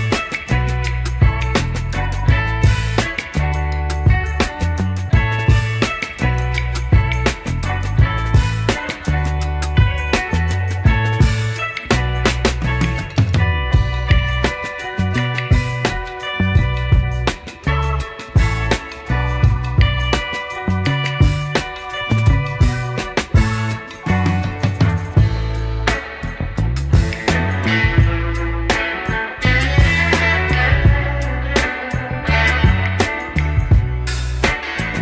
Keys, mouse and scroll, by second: 4.3 ctrl+z, 4.6 ctrl+z, 4.9 ctrl+z, 5.3 ctrl+z, 5.9 ctrl+z, 6.1 ctrl+z, 6.5 ctrl+z, 6.9 ctrl+z, 7.1 ctrl+z, 8.4 Tab, 9.3 s, 11.8 click, 12.2-13.2 drag, 13.7 ctrl+a, 14.9 Tab, 15.7 middle click, 16.7 KP_3, 18.4 Tab, 19.7 s, 22.6 Tab, 22.8-24.1 scroll up 2, 24.2 Tab, 24.6 ctrl+a, 25.2 Tab, 25.6 middle click, 26.8 scroll down 1, 27.7 ctrl+b.